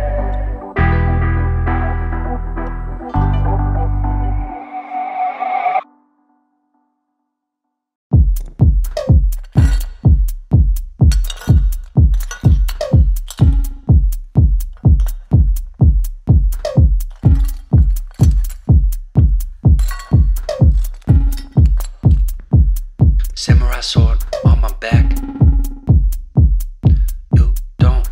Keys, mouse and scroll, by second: 0.2 ctrl+space, 0.4 ctrl+click, 0.6-1.6 ctrl+space, 3.3 scroll up 1, 3.4 shift+click, 4.2 ctrl+g, 4.8-6.2 ctrl+space, 5.7 ctrl+space, 8.9 ctrl+t, 20.5 ctrl+space, 20.6 ctrl+click, 20.9-21.6 ctrl+space, 22.0 click, 24.8 shift+Down.